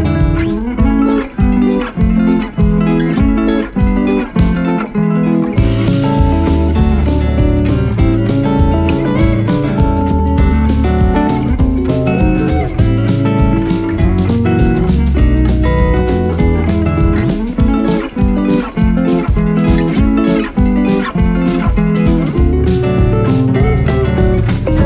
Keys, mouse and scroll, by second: 6.2 typing, 11.9-12.4 alt+scroll down 1, 12.6-12.9 alt+scroll down 5, 16.4 shift+click, 20.5 alt+scroll up 1, 21.0-21.8 typing, 21.1 alt+scroll up 1, 22.9 typing.